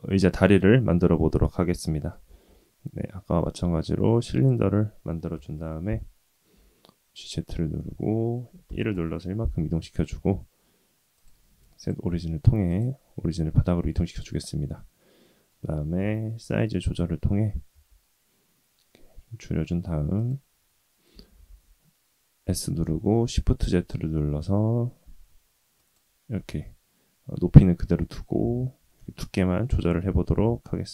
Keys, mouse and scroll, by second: 2.2 shift+a, 5.3 KP_1, 6.5 g, 11.1-12.8 drag, 14.6-15.5 middle drag, 15.9 KP_1, 17.7 s, 21.1 s, 26.3-27.8 middle drag, 28.2-28.6 scroll down 2, 28.6-30.2 scroll up 1.